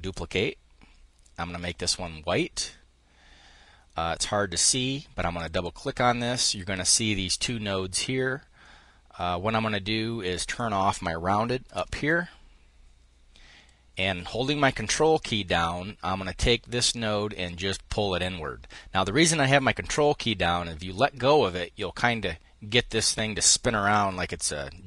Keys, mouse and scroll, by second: 1.3 click, 5.0 click, 9.9 click, 11.3 0, 11.5 Return, 15.2-24.8 ctrl+drag.